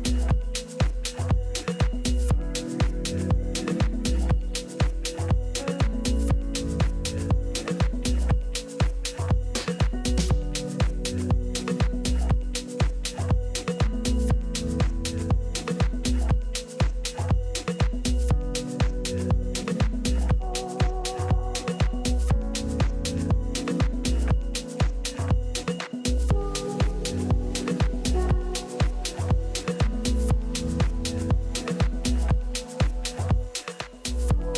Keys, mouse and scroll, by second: 13.2-15.0 right drag, 16.0-20.5 middle drag, 18.6 a, 20.5-22.0 drag, 22.0 right click, 22.5-30.5 right drag, 29.4-31.2 middle drag, 29.6 click.